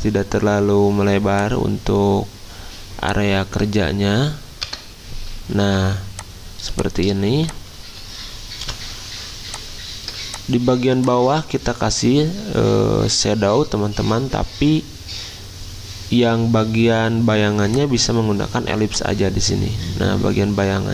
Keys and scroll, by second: 4.6 Return, 5.6 z, 6.7 r, 8.6 v.